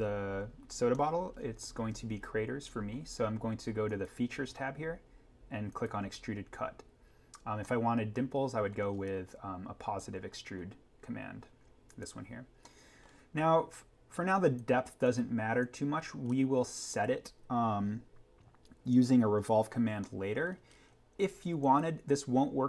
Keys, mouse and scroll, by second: 0.9 middle click, 1.2 scroll up 1, 7.0 scroll down 1, 7.6-9.0 middle drag, 9.0-10.7 scroll up 1, 12.6 middle click, 14.5 click, 16.3-16.7 scroll up 1, 19.3-20.0 scroll down 1, 20.0 middle click, 20.7-21.6 scroll up 1, 21.6 click.